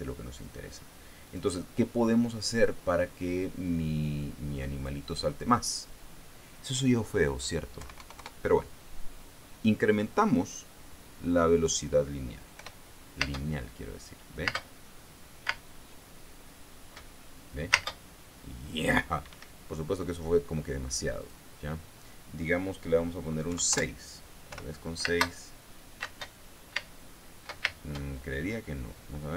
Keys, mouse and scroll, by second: 1.8 click, 4.6 click, 5.9 click, 8.3 KP_1, 8.5 KP_0, 8.7 KP_Enter, 13.1 p, 13.8 space, 15.0 space, 16.0 space, 18.3 space, 19.8 Escape, 21.7 click, 24.0 KP_6, 24.2 KP_Enter, 25.0 p, 25.6 space, 26.6 space.